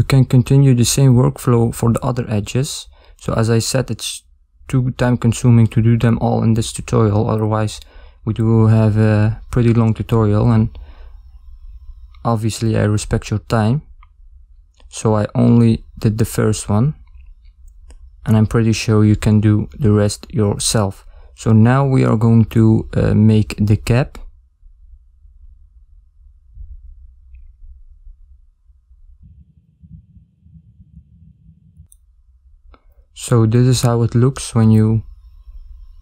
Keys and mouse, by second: 1.4 ctrl+middle click, 2.2 middle click, 3.9 KP_1, 5.1 ctrl+middle click, 13.4 ctrl+alt+shift+z, 13.4 ctrl+middle click, 14.3 shift+middle click, 15.2 ctrl+middle click, 16.0 shift+middle click, 31.8 shift+middle click, 32.1 ctrl+middle click, 35.7 shift+middle click.